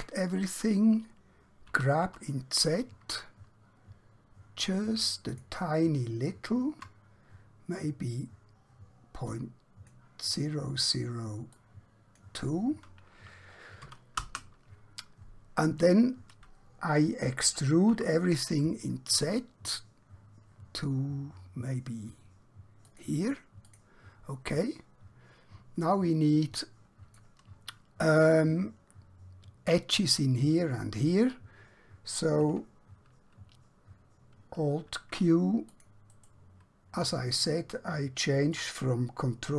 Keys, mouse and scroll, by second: 2.8 typing, 5.4 shift+click, 9.2 click, 13.8 2, 14.2 Return, 17.5-17.9 typing, 22.9 click, 24.6 middle click, 34.5 alt+Num_Lock, 35.7 click, 36.2 right click.